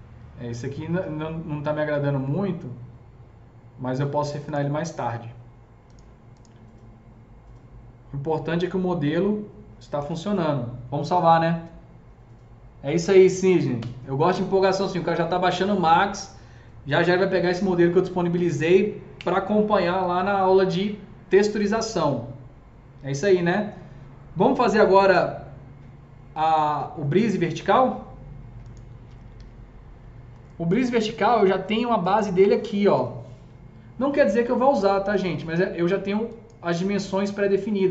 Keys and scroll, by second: 10.0 ctrl+s, 28.9-29.9 typing.